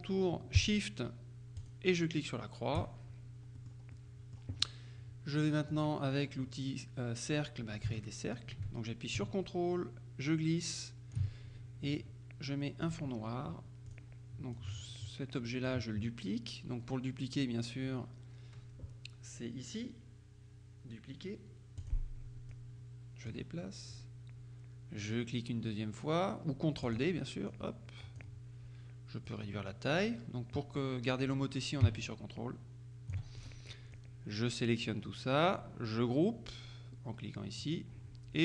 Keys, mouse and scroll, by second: 1.7 shift+click, 3.6 click, 5.8 click, 8.0-11.7 ctrl+drag, 12.9 click, 13.9 click, 14.6-16.2 drag, 21.9 click, 22.6-23.9 drag, 26.9 click, 29.3-34.0 drag, 37.7 click.